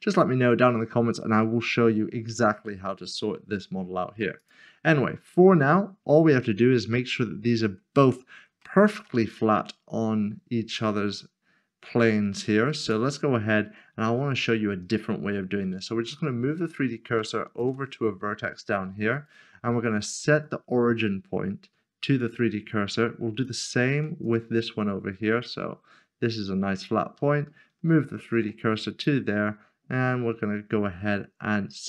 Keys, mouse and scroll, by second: 4.4 click, 6.1 middle click, 8.6 shift+middle click, 9.3 scroll up 1, 12.8 click, 14.0-14.4 scroll up 1, 14.5 shift+middle click, 19.1 right click, 22.2 click, 23.4 shift+click, 24.2 click, 25.3-25.8 scroll down 1, 27.2 shift+right click.